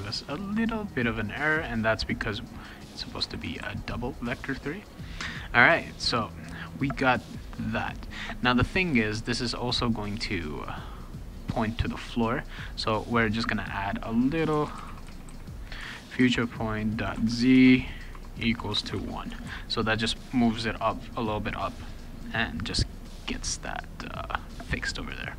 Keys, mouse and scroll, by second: 3.0 click, 3.2 d, 3.6 ctrl+s, 5.0 click, 9.3 click, 12.8 click, 13.7 Return, 14.3-19.5 typing, 15.8 Tab, 24.2 click.